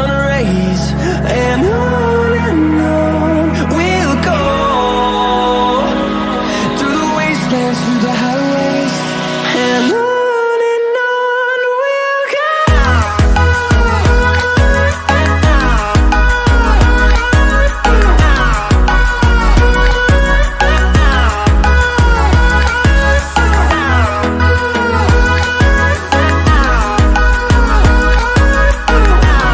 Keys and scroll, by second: 11.8 space.